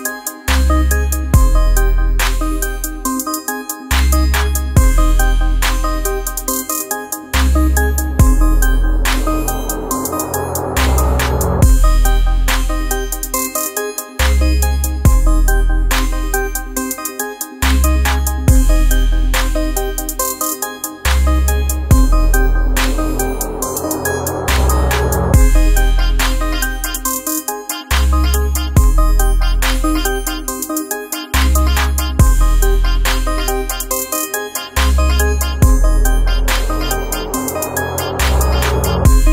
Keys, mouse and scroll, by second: 1.6-5.9 drag, 5.9 ctrl+z, 6.6-9.3 drag, 9.3 ctrl+Return, 11.2-12.9 drag, 12.9-15.8 drag, 18.8 space, 19.0 click, 19.3 space, 21.5-25.1 drag, 25.1 click, 25.3 space, 25.6 click, 25.9 space, 29.4-35.5 drag, 35.8 click.